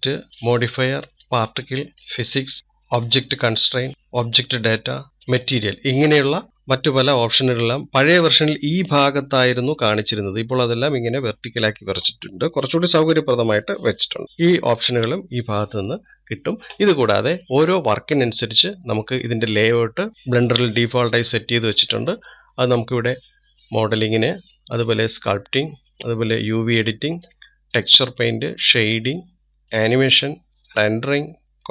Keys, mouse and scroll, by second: 24.7 click, 26.2 click, 27.9 click, 29.0 click, 29.9 click, 30.7-31.7 drag.